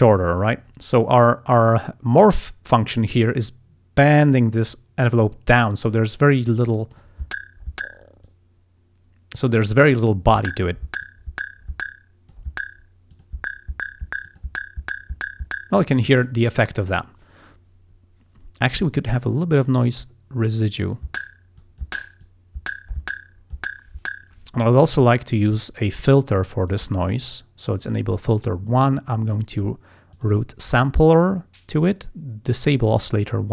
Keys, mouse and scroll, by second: 1.1 click, 7.0 click, 8.3-9.7 drag, 11.1-12.6 drag, 13.2 click, 14.3 click, 19.0-21.2 drag, 21.7 click, 22.3-23.8 drag, 26.7 click, 30.2 click, 33.0 click.